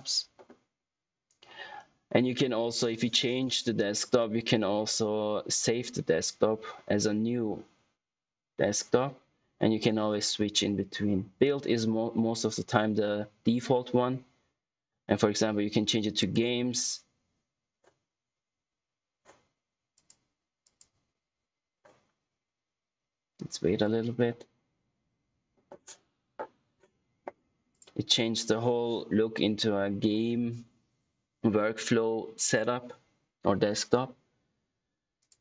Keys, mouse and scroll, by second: 16.1 click, 19.9 click, 27.6 click.